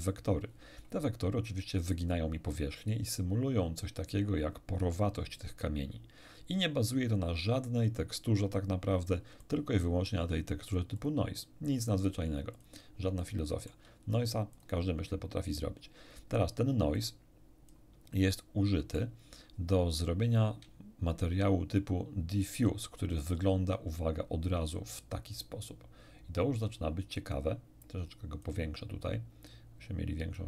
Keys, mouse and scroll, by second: 9.4 middle click, 10.7 ctrl+shift+click, 12.5 ctrl+shift+click, 13.2 middle click, 14.5 click, 16.9-17.9 drag, 18.3 middle click, 21.8 ctrl+shift+click, 24.9-25.7 scroll up 4, 26.1-26.5 scroll down 2, 27.8 click, 30.3 click.